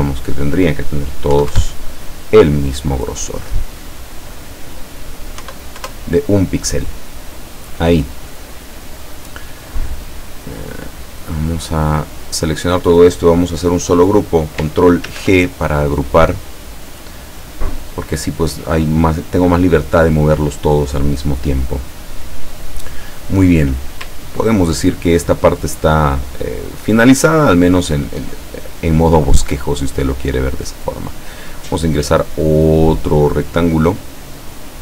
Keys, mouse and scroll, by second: 0.3 click, 1.4 KP_1, 1.5 KP_Enter, 3.5 click, 4.4 click, 5.5 KP_1, 5.9 KP_Enter, 7.8 click, 11.1 click, 11.5-12.7 drag, 15.1 ctrl+g, 15.9-18.3 drag, 25.1 ctrl+scroll down 2, 25.8 ctrl+middle click, 27.3 ctrl+scroll up 2, 27.9-28.2 ctrl+scroll down 2, 28.5-29.7 ctrl+drag, 30.8 click.